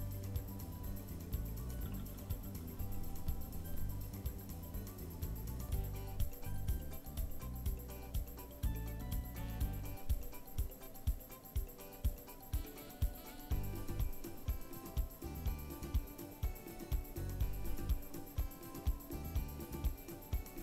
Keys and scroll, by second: 0.2 KP_3, 0.5 KP_1, 5.1 KP_4, 9.7 KP_7, 10.0 KP_1, 14.3 KP_1, 14.6 KP_0, 14.7 KP_4.